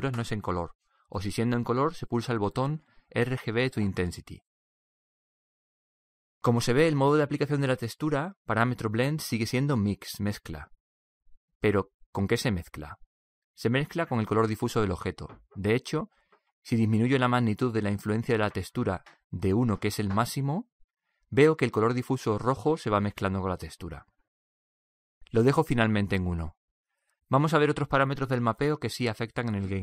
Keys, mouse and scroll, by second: 17.4-20.9 drag, 27.6-29.4 drag.